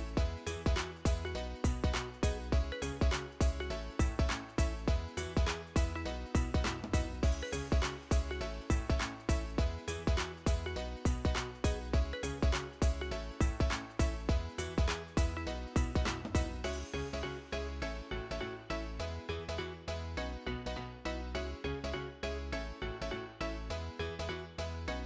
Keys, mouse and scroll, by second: 2.3 scroll up 3, 5.7 scroll up 1, 10.5 alt+b, 21.9-22.9 typing, 24.7-25.0 typing.